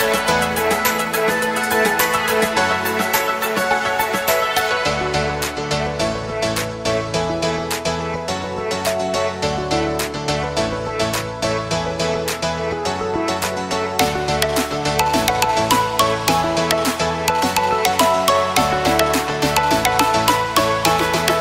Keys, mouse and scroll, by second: 6.7 alt+scroll up 1, 11.5-12.8 alt+scroll down 1, 13.3 space, 13.4 click, 20.8-21.4 typing.